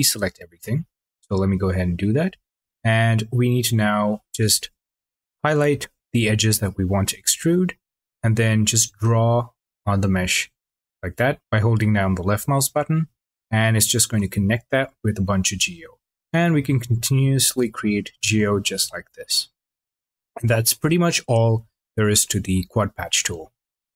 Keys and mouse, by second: 0.6 click, 3.9 click, 8.7 click, 18.9 click.